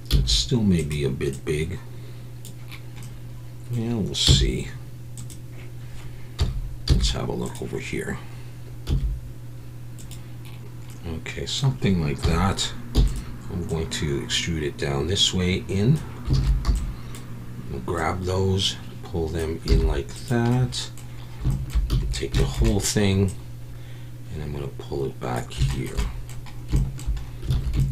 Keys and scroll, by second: 0.1 s, 4.2 z, 6.4 KP_1, 6.9 z, 8.9 s, 12.2 KP_1, 12.9 e, 16.3 alt+a, 16.6 b, 19.7 z, 21.9 a, 27.5 alt+a.